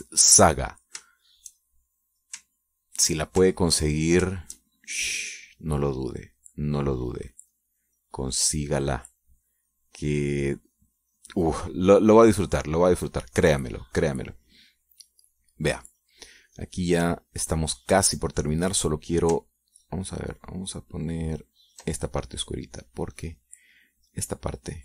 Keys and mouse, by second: 0.5 middle click, 1.1 middle click, 1.3 middle click, 2.5 shift+click, 4.2 ctrl+click, 4.8 ctrl+click, 5.7-15.5 shift+drag, 15.6-17.1 drag, 17.2 click, 21.4 ctrl+click, 22.4 ctrl+click, 24.0-24.8 drag.